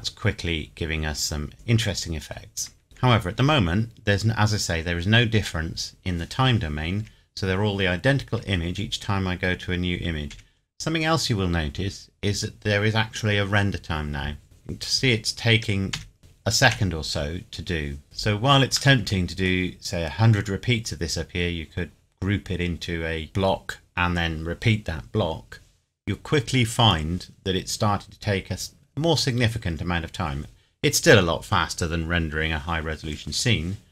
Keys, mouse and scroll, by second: 0.2 scroll up 1, 1.5 click, 3.0 Right, 5.4 Right, 10.3 Right, 14.4 Right, 15.9 Right, 16.7 Right, 19.0 middle click.